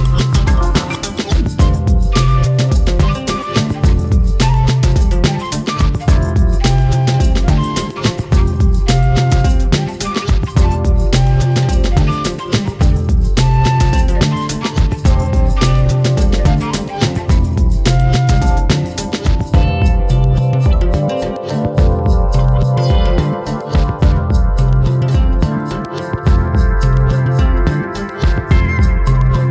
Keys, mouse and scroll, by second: 0.4-1.8 drag, 2.5 click, 7.0 click, 10.2 click, 10.7 shift+click, 11.0-11.8 scroll up 3, 11.4 shift+middle click, 11.8-12.6 shift+middle drag, 12.6 ctrl+click, 13.4 ctrl+z, 13.9 shift+click, 15.1 ctrl+l, 15.2-15.7 scroll down 12, 15.7-16.1 middle drag, 16.1 click, 16.3-16.6 scroll up 4, 16.6-17.3 middle drag, 17.3 scroll up 1, 17.6 middle click, 18.5 click, 19.1-20.5 drag, 21.2 click, 24.2 click, 24.4-24.7 scroll down 2, 24.7-25.1 middle drag, 25.1 scroll down 1, 25.3 shift+middle click, 25.6-26.1 scroll up 4, 26.1 click, 27.0 click.